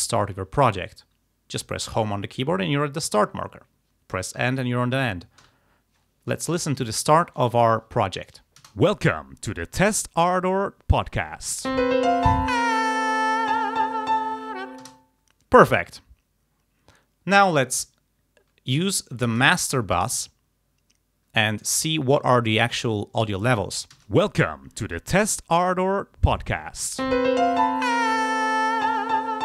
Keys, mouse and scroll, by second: 1.8 Home, 4.4 End, 5.5 Home, 8.7 space, 14.9 space, 19.5 click, 24.0 space.